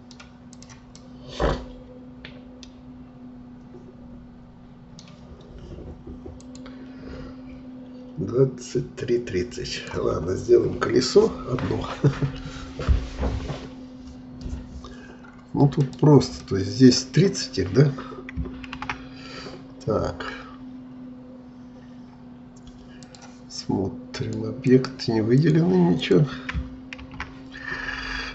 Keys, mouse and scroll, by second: 0.5 click, 1.0-4.0 middle drag, 9.8 click, 10.2-10.6 scroll down 3, 15.3-15.8 scroll up 1, 15.8-18.8 middle drag, 18.8 shift+a, 23.0-27.0 drag, 27.0 shift+a.